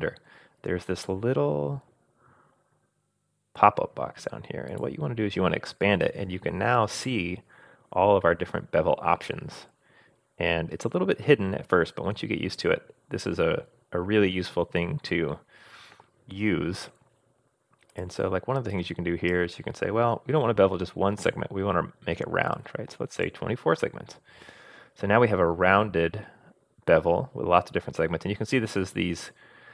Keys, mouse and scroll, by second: 4.7 click, 17.9-24.0 drag.